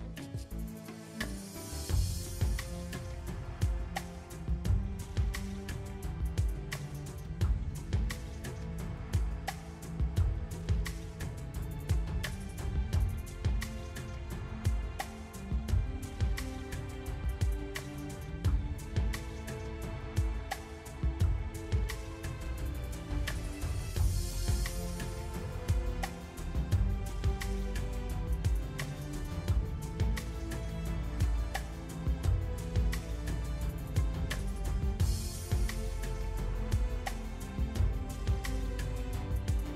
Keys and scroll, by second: 1.7 shift+a, 11.3 r.